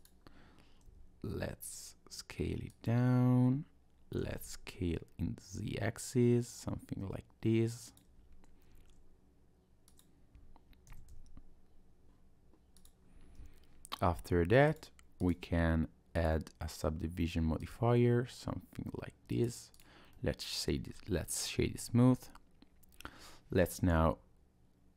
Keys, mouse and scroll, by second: 0.0 click, 0.9 s, 4.2 s, 8.7 s, 10.9 s, 13.1 Tab, 14.7 click, 15.2 click, 17.6 click, 19.3 right click, 20.1 middle click, 20.9-21.6 scroll up 1, 21.6 Tab, 24.0 i.